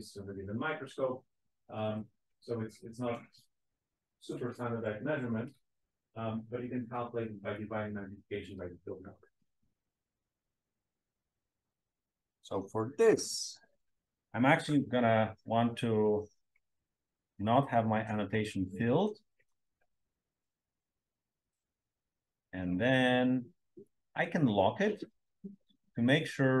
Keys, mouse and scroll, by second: 20.9-22.2 scroll up 1, 23.8-25.5 scroll up 2, 25.5-26.6 scroll up 1.